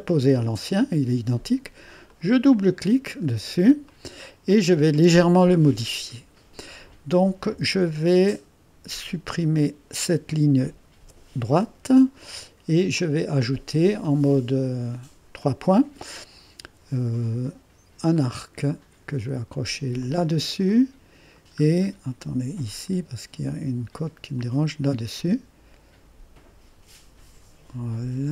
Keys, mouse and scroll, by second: 2.1 click, 2.5 click, 3.2-3.8 scroll up 1, 3.9 right click, 9.3 click, 11.0 Delete, 13.0 click, 15.4 click, 17.3-17.7 scroll up 1, 18.2 click, 20.0 click, 20.7 click, 21.2 click, 21.7-22.6 scroll up 1, 24.4 click.